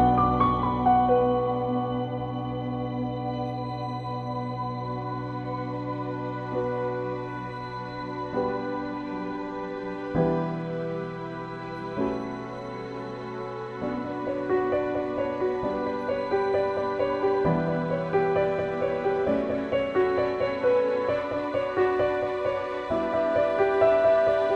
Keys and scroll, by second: 3.6 [, 6.3 x, 7.3 x, 8.7 ctrl+z, 11.4 [, 15.0 ctrl+j, 15.9 ctrl+j, 21.1 ctrl+j, 22.8 ctrl+g, 23.1-24.1 typing, 24.3 Return.